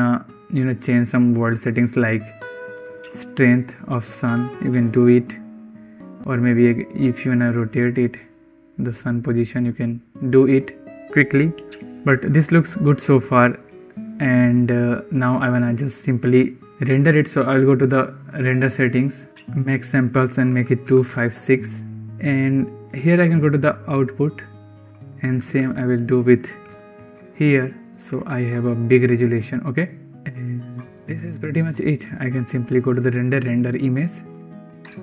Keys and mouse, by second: 1.2 middle click, 2.7-3.1 drag, 4.4 ctrl+z, 4.9 click, 6.4-9.6 drag, 17.3 click, 20.0-21.4 drag, 22.7 click, 24.9-27.1 drag, 28.6 ctrl+s, 32.7-33.3 drag.